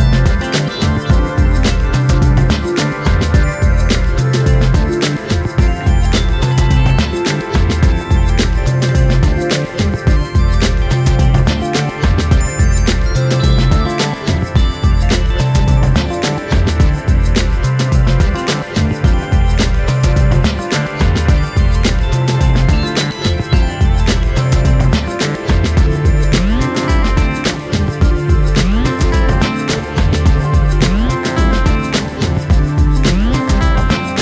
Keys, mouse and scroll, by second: 1.3 a, 1.6 m, 2.5 click, 3.8 click, 4.1 click, 4.8 KP_3, 5.1 KP_1, 5.3 scroll up 1, 5.6 click, 7.7 scroll down 3, 7.9-9.2 middle drag, 9.2 KP_7, 9.3-9.9 scroll up 3, 9.9 shift+middle click, 10.2 click, 10.8 ctrl+z, 11.8 click, 12.4 s, 15.5 click, 16.0 s, 17.8 scroll down 1, 18.0 middle click, 19.4 KP_7, 19.6-20.0 scroll up 1, 20.0 a, 20.3 click, 22.0 shift+middle click, 22.5 Tab, 24.6 s, 25.8 s, 27.7 KP_3, 28.0 KP_1, 28.6 Tab, 29.0 click, 30.8 click, 31.5 shift+middle click, 32.5 r, 33.3 ..